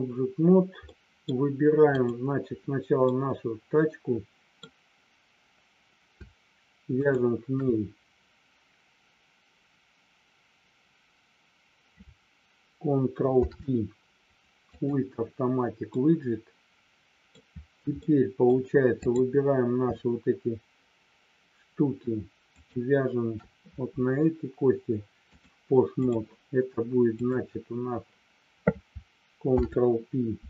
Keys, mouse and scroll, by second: 0.7 middle click, 2.0 click, 3.1-4.5 middle drag, 6.9 shift+click, 13.3 ctrl+p, 15.9-17.3 middle drag, 18.0 middle click, 19.1 click, 22.5 shift+click, 25.3 click, 27.1 click, 29.5 ctrl+p.